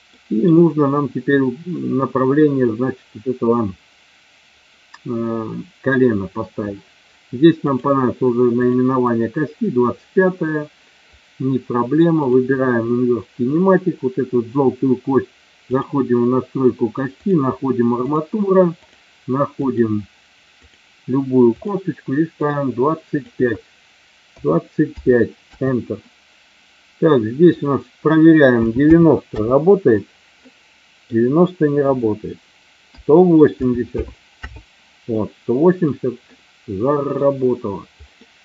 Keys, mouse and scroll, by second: 0.0 middle click, 7.7 click, 8.7 click, 15.8 click, 17.2 click, 19.6 click, 21.5 click, 27.4 click, 30.4 middle click, 31.8 click, 35.0 middle click, 36.3 middle click, 38.2 middle click.